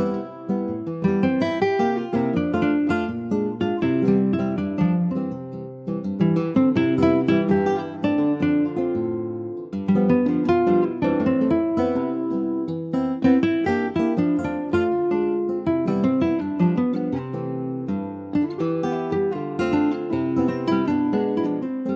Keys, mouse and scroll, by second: 0.3 Tab, 1.1 click, 3.3 click, 5.2 1, 5.4 click, 6.8 click, 8.5 Tab, 8.7 click, 9.1 click, 9.6 scroll up 2, 10.2 scroll down 1, 10.5-12.6 shift+middle drag, 12.6 click, 15.5 click, 16.0 alt+z, 16.1 click, 16.4 scroll down 4, 16.6 middle click, 17.2 click, 17.5-19.2 middle drag, 19.2 ctrl+s, 19.5 shift+middle click, 20.3 ctrl+s, 20.6 click, 20.6 middle click, 21.2 click, 21.5 ctrl+s, 21.8 click.